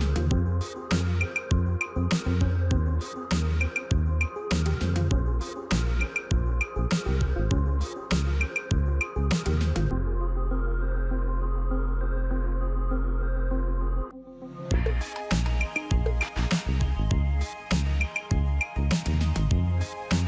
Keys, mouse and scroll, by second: 9.9 right click, 19.8 ctrl+click.